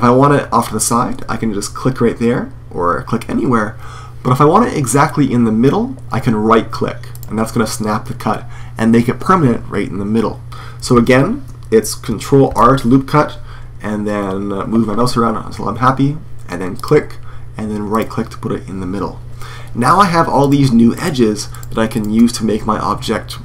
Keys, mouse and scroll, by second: 7.0-8.9 right drag, 10.7 super+z, 12.2 ctrl+r, 20.2-23.4 right drag.